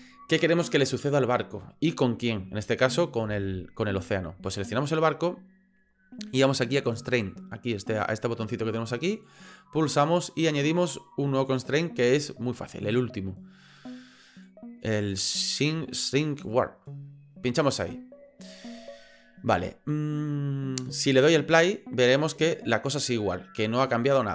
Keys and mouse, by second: 10.5-16.4 drag, 22.1 click.